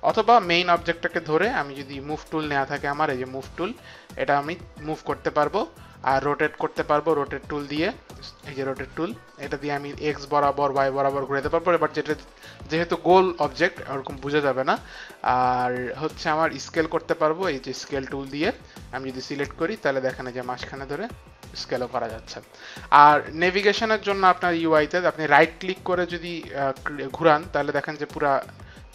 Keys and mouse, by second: 0.3 click, 4.2 click, 7.4 click, 8.3 click, 9.8 click, 12.3 ctrl+z, 13.5 click, 17.8 click, 18.4 click, 20.3 click, 22.6 click, 25.9 right click.